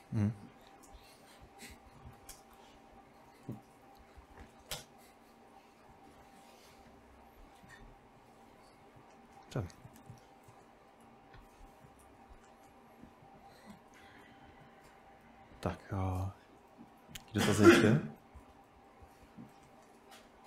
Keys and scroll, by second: 0.1 ctrl+w, 0.3 ctrl+w, 0.9 ctrl+w, 1.4 ctrl+w, 1.7-2.7 typing, 3.3 ctrl+w, 3.8 typing, 4.8 Return.